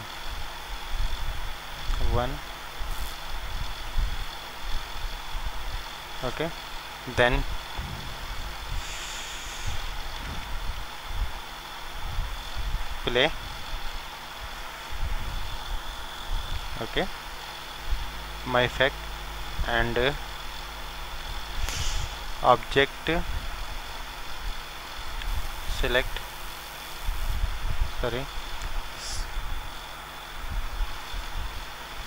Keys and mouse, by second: 1.8 KP_1, 3.8 ctrl+alt+KP_1, 6.4-8.1 drag, 7.3 middle click, 8.1-10.4 middle drag, 9.4 click, 10.4 ctrl+z, 10.7 ctrl+z, 10.7 click, 12.1-16.0 drag, 12.1-13.9 middle drag, 20.5-23.1 drag, 23.1 middle click, 26.9-31.4 drag.